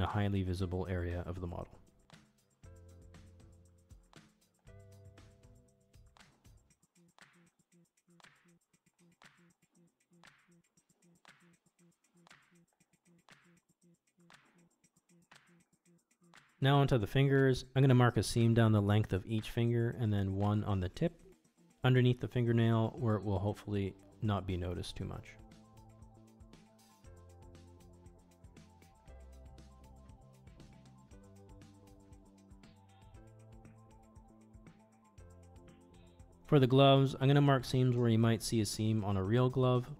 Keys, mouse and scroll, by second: 0.4 ctrl+e, 2.3 middle click, 4.4 middle click, 5.1-7.7 middle drag, 7.8 middle click, 8.2 shift+middle click, 8.5 middle click, 9.0 ctrl+e, 11.2 middle click, 11.7 middle click, 13.7 shift+middle drag, 14.4 shift+middle click, 14.8 middle click, 15.6 shift+middle drag, 16.3 click, 17.0 Tab, 17.7 middle click, 18.1 alt+click, 18.4 middle click, 19.0 ctrl+e, 19.7 middle click, 20.0 alt+click, 20.3 ctrl+e, 20.6 middle click, 20.9 click, 21.2 middle click, 21.8 middle click, 22.6 middle click, 23.2 click, 23.7 alt+shift+click, 24.0 middle click, 24.2 ctrl+x, 24.5 ctrl+z, 24.8 ctrl+z, 25.8 middle click, 26.8 middle click, 27.5 middle click, 28.2 alt+shift+click, 28.4 middle click, 29.0 middle click, 29.5 middle click, 29.8 ctrl+e, 30.7 ctrl+e, 32.0 middle click, 32.2 Tab, 32.7 click, 33.2 middle click, 33.5 shift+middle click, 34.1 middle click, 34.6 middle click, 35.6 middle click, 36.0 middle click, 37.0-37.5 middle drag, 37.6 shift+middle click, 38.0 Tab, 38.9 middle click, 39.5 alt+z, 39.8-39.9 middle drag.